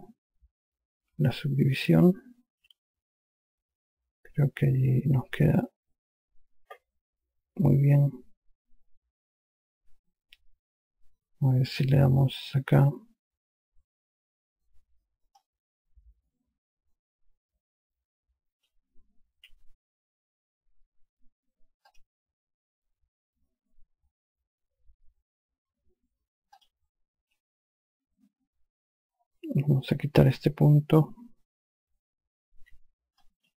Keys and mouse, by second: 1.7 q, 11.1 q, 15.9 click, 19.9 q, 22.4 click, 27.1 click, 27.8 q, 33.1 5.